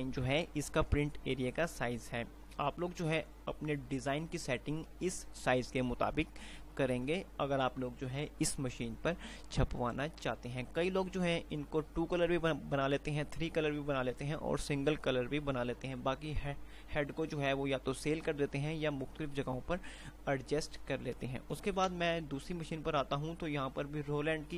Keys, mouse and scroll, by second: 21.9 Page_Down, 24.4 typing.